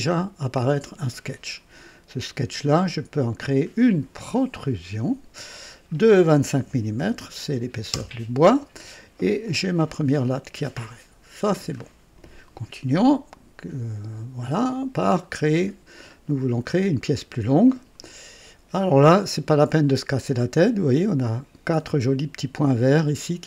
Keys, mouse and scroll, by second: 0.1 right click, 4.5 click, 6.6 KP_2, 6.9 KP_5, 7.9 Return, 9.4-11.9 drag, 14.5 click, 16.0-16.4 scroll up 1, 16.7 right click.